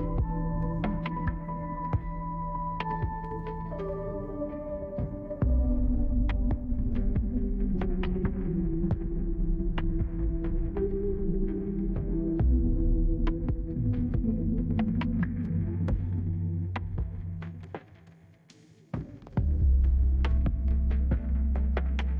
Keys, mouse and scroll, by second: 3.8 5, 4.1 Return, 4.5 right click, 6.3 click, 8.4 click, 10.6 5, 10.7 Return, 14.5 click, 14.7 click, 17.6 4, 17.9 Return, 18.6 right click, 19.4 middle click.